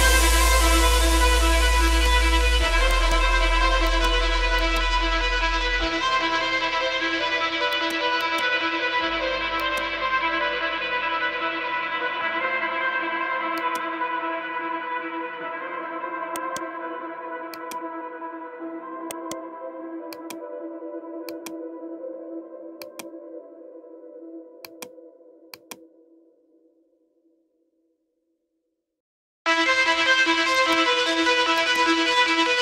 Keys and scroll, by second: 0.2 shift+F2, 0.5 Escape, 1.2 F3, 1.5 Escape, 6.6 KP_Add, 18.5 Escape, 21.7 shift+F2, 22.0 Escape, 32.0 F3.